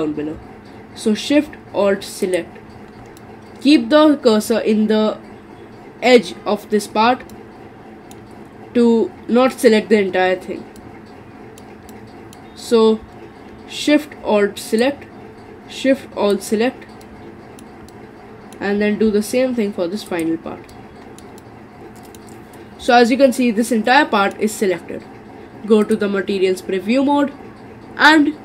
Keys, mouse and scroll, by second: 2.2 alt+shift+click, 3.2-6.2 middle drag, 7.3-14.7 middle drag, 14.7 alt+shift+click, 16.3 alt+shift+click, 17.0 alt+shift+middle click, 17.9-20.1 middle drag, 20.1 alt+shift+click, 20.7-22.5 shift+middle drag, 22.5-22.8 scroll down 4, 22.9-25.8 middle drag, 25.8 click.